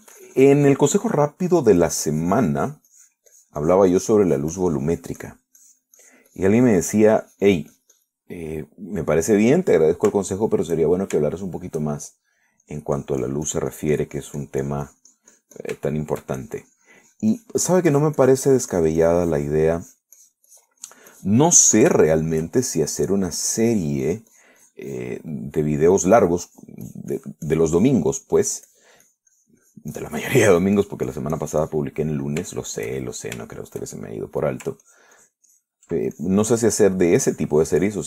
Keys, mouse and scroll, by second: 2.6 middle click, 3.5-9.5 drag, 9.5-10.9 middle drag, 10.1 click, 11.1 shift+middle click, 11.5 shift+middle click, 13.9-17.1 drag, 17.1 shift+middle click, 17.6-21.0 shift+drag, 21.4-22.7 drag, 22.8 middle click, 23.3 shift+middle click, 23.9-26.5 shift+drag, 26.6 shift+middle click, 27.9-29.3 drag, 29.4 middle click, 29.9-33.2 drag, 33.3 middle click, 33.8 shift+middle click, 34.3-35.8 shift+middle drag, 36.1-37.1 ctrl+drag, 37.4 ctrl+click.